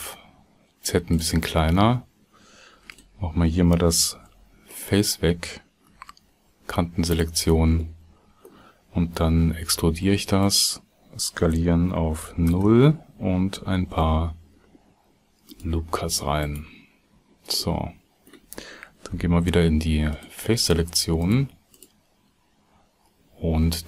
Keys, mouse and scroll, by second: 6.4 x, 6.4 2, 13.5 ctrl+s, 13.8 ctrl+r, 19.9 alt+3, 20.1 alt+click, 21.2 alt+shift+click, 21.7 alt+shift+click.